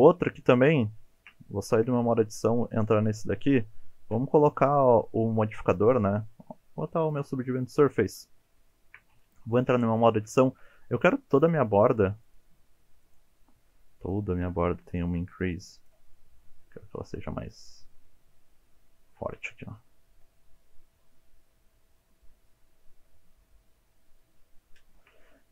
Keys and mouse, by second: 0.1 shift+middle click, 1.2 shift+middle click, 1.9 Tab, 2.2 middle drag, 2.8 click, 3.1 middle drag, 4.7-7.2 drag, 8.7 shift+middle click, 9.5 Tab, 10.1 shift+middle click, 10.5 2, 11.4 alt+click, 12.3 alt+shift+click, 13.0 alt+shift+click, 14.0 alt+shift+click, 15.3 click, 16.2 middle click, 18.0-21.8 middle drag, 22.1 KP_7, 22.2 alt+z, 24.0 alt+z, 24.1 middle click, 24.9 shift+middle click.